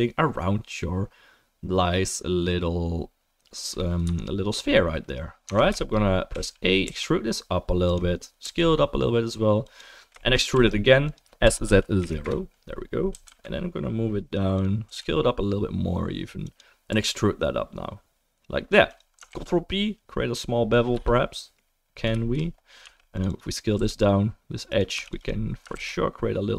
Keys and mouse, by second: 5.4 Tab, 5.9-10.3 shift+middle drag, 6.3 a, 6.9 e, 8.4 s, 10.3-19.3 drag, 10.5 e, 11.4 s, 13.1 g, 14.9 s, 16.9 e, 19.3 ctrl+b, 19.3-22.8 ctrl+middle drag, 22.8-26.0 right drag, 22.8 2, 23.3 click, 23.7 s, 24.9 2, 25.0 click, 25.7 ctrl+b, 26.0-26.5 drag.